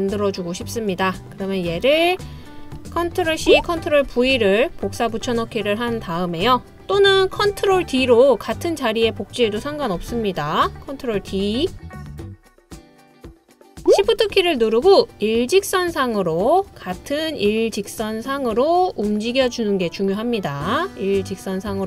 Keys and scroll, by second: 3.5 super+c, 4.1 super+v, 10.0 BackSpace, 11.9 super+d.